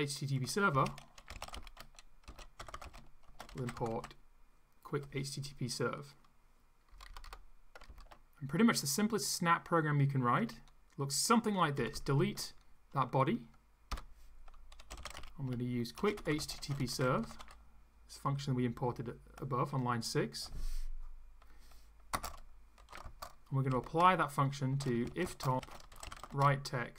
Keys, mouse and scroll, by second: 0.5-4.4 typing, 6.9 Down, 7.9 ctrl+Left, 11.8 shift+Down, 13.9 Delete, 14.5-17.9 typing, 22.1-26.9 typing.